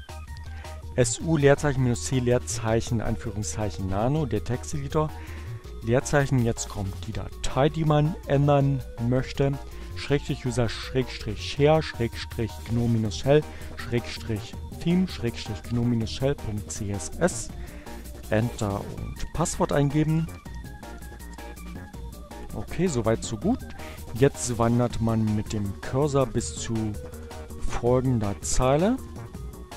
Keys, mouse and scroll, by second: 16.7 Return, 19.1-20.1 typing, 23.0 Page_Down, 24.5 Page_Down.